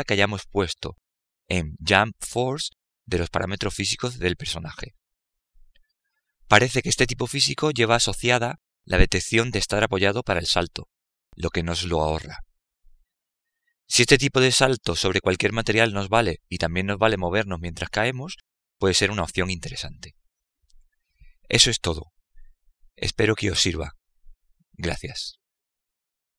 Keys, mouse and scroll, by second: 2.9-9.9 drag.